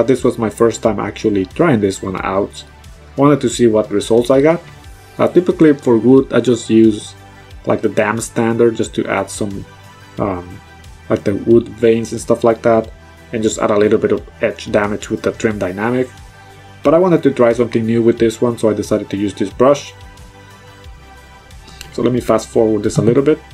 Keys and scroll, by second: 3.0 -.